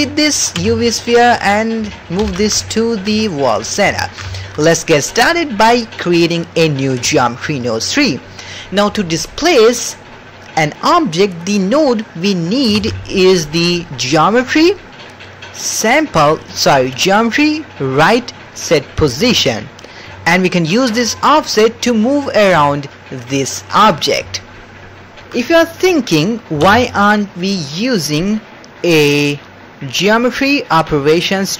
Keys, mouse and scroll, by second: 0.5 x, 2.2 alt+g, 2.6-3.0 ctrl+middle drag, 3.2 shift+middle drag, 3.6 middle click, 4.0 ctrl+middle click, 4.3 shift+middle click, 7.0 click, 12.2 middle click, 12.8 shift+a, 20.7 middle click, 21.2-22.3 shift+drag, 22.8-23.9 shift+drag, 24.3-25.3 shift+drag, 25.9 middle click, 26.6 shift+a.